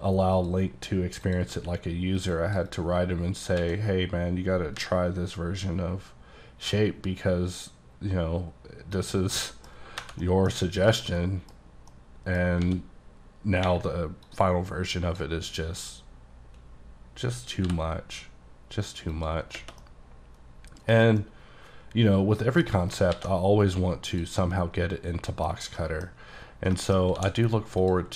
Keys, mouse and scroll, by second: 0.4 click, 0.9-1.3 scroll down 1, 1.3 click, 1.6 q, 2.2 click, 2.7 double click, 3.7 x, 4.9 v, 5.5-7.3 scroll up 4, 7.3-8.0 scroll up 1, 8.0-9.0 scroll down 2, 9.0 click, 9.4 middle click, 10.0 1, 10.3 middle click, 10.8 click, 11.1 middle click, 11.7 scroll up 2, 12.0 middle click, 12.7 d, 14.3 click, 17.7 b, 19.2 click, 19.9 middle click, 21.0 scroll down 1, 21.3 middle click, 23.2 alt+x, 24.1 click, 24.5 middle click, 25.6 scroll up 1, 25.8 middle click, 26.8 shift+middle click, 27.1 scroll up 2, 27.2 d, 27.9 click.